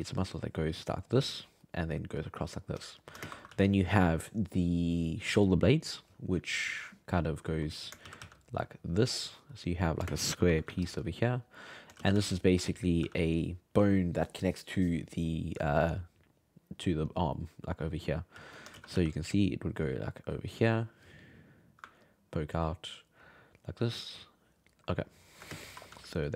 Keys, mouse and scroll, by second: 0.2-1.6 drag, 1.6 middle click, 2.2 click, 2.9 shift+middle click, 3.2 shift+space, 3.5 f, 6.4-8.0 drag, 8.0 shift+c, 8.2 f, 8.6-10.1 drag, 10.1 shift+space, 10.7 f, 11.0 click, 11.7 middle click, 12.0 shift+c, 12.1 f, 12.5 middle click, 13.0 f, 18.3 f, 18.7 shift+c, 18.9 f, 19.5-24.9 drag, 24.9 middle click, 25.5 shift+space, 25.7 6, 25.9 f, 26.2 click.